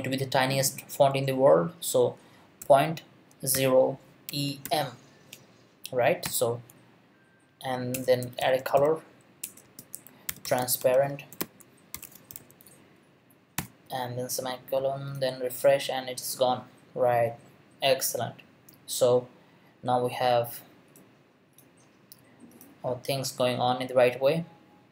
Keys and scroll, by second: 2.6 ., 3.5 0, 4.3 e, 4.6 m, 7.9 Return, 8.0-13.6 typing, 9.4 Return.